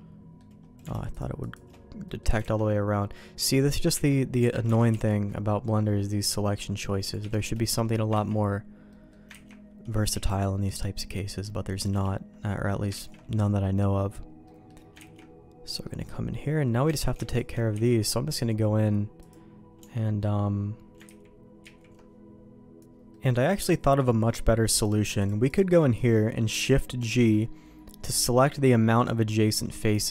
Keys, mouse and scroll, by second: 1.1 alt+shift+click, 2.0 middle click, 2.5 alt+a, 2.9 middle click, 3.9 Tab, 4.3 Tab, 4.8 alt+a, 4.8 c, 7.5 middle click, 8.2 ctrl+q, 8.8 middle click, 9.3 ctrl+x, 10.0 c, 13.1 ctrl+q, 14.4 middle click, 14.9 ctrl+x, 15.6 middle click, 16.8 Tab, 17.3 alt+click, 17.7 x, 19.7 Tab, 21.0 ctrl+z, 21.6-22.8 ctrl+z, 22.8 alt+a, 23.1 middle click, 23.6 shift+middle click, 24.3 middle click, 24.8 click, 25.2 shift+click, 25.9 middle click, 27.0 shift+g.